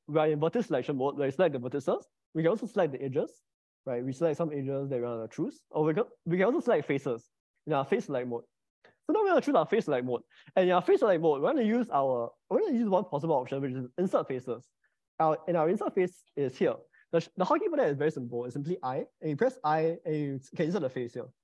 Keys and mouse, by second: 2.4 click, 3.4 click, 4.1 middle click, 4.7 click, 7.6 click, 14.2 middle click, 19.8 i.